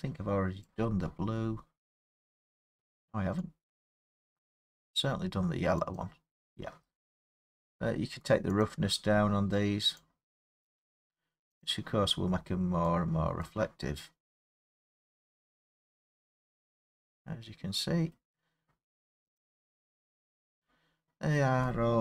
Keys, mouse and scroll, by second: 0.6 click, 4.4 click, 6.0 click, 8.6 click, 10.7 click, 11.6 click, 13.4 click, 14.6 click, 16.3-16.7 scroll, 18.1 middle click, 19.4 click, 19.9-20.2 scroll, 21.4-22.0 middle click.